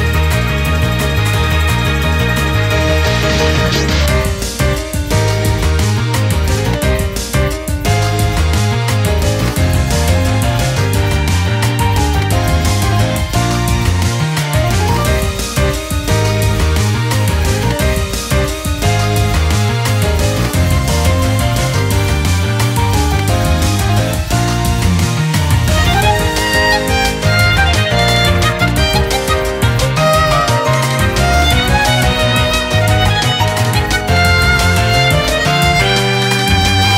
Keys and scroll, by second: 0.0 ctrl+u, 3.5 typing, 5.8 typing, 10.5 typing, 11.4 ctrl+u, 13.8 ctrl+u, 14.5 typing, 18.3 typing, 20.1 ctrl+t, 28.5-33.1 typing, 30.3 ctrl++, 32.8 ctrl+-, 34.3 ctrl+-, 34.5 ctrl+-, 35.0 ctrl+-, 35.7 ctrl+-, 36.4-36.9 typing.